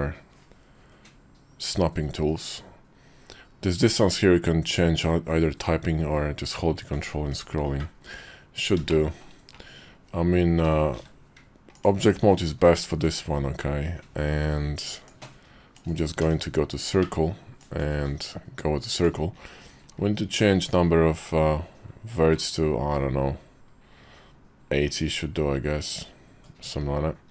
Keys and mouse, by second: 8.8 shift+middle click, 10.7 shift+v, 14.8 ctrl+click, 16.0 d, 17.4-27.3 ctrl+drag.